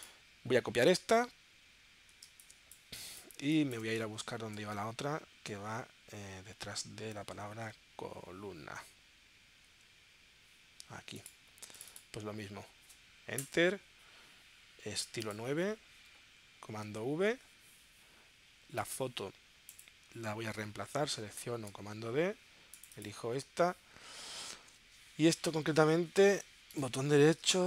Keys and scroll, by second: 2.4 space, 4.3 super+Tab, 7.8 super+Tab, 13.4 Return, 17.0 super+v, 21.7 super+d.